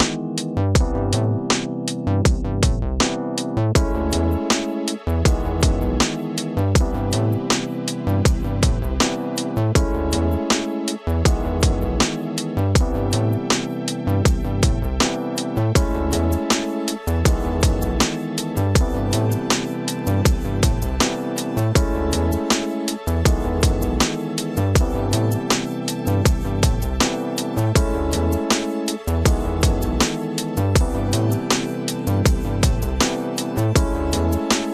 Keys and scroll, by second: 11.6 ctrl+space, 12.8 space, 14.2 ctrl+z, 18.5 ctrl+d, 21.3 ctrl+u, 25.9 Return, 26.4 v, 28.9 ctrl+KP_Add, 29.4 space, 34.1 space.